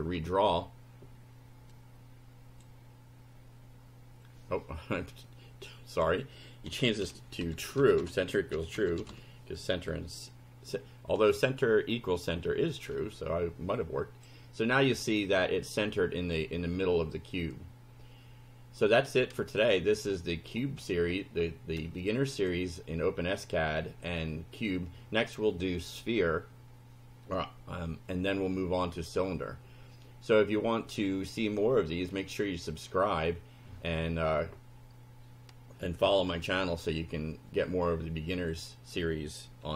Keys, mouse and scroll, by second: 0.1 F5, 1.7-2.7 drag, 5.1-6.2 drag, 6.5-9.6 typing, 12.9 F5, 13.8 click, 18.9 click, 19.6 click, 20.1 click, 20.8-21.4 scroll up 2, 22.1 click, 22.8-23.1 scroll up 1.